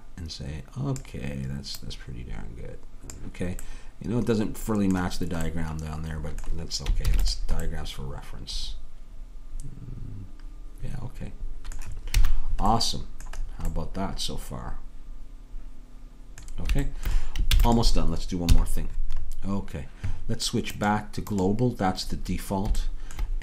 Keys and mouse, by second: 3.7-7.2 middle drag, 7.2 ctrl+s, 8.6-10.4 middle drag, 12.2 a, 13.9-15.8 middle drag, 17.6 ctrl+s, 18.5 KP_3.